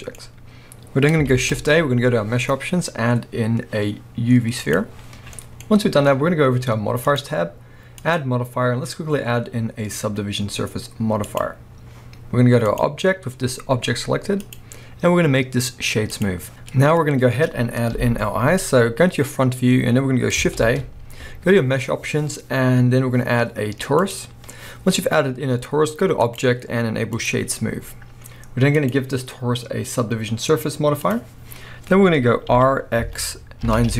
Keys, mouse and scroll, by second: 1.3 shift+a, 5.7-7.1 scroll up 1, 7.1 click, 8.0-33.9 drag, 17.9 KP_1, 18.7-20.6 scroll up 1, 20.6 shift+a, 32.5 r.